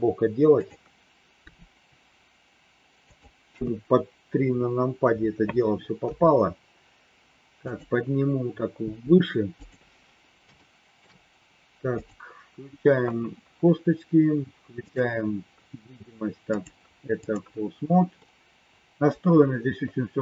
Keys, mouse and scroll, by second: 1.4 r, 3.5 KP_3, 6.0 g, 8.8 g, 10.5 shift+middle click, 11.9 click, 14.9 click, 16.5 click, 18.2 middle click.